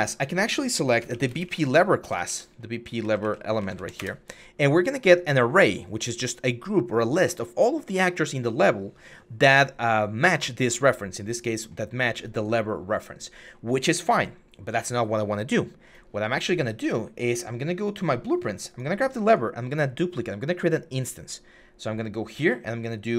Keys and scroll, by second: 0.6-2.6 typing, 2.8 Down, 3.0 Up, 3.6 Down, 3.8 Return.